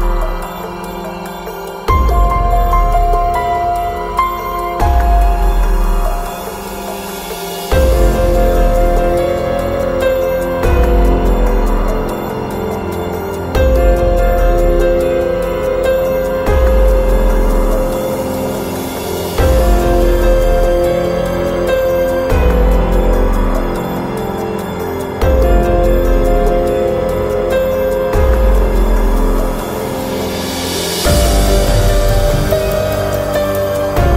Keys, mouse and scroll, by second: 3.4 middle click, 4.4-5.5 right drag, 5.5 Delete, 6.4-7.4 scroll up 1, 16.7 middle click, 17.6-18.8 drag, 19.0-20.5 middle drag, 20.7 KP_3, 23.3-24.5 drag, 28.2-29.4 drag, 30.1-31.5 drag, 31.5 middle click, 32.1 click.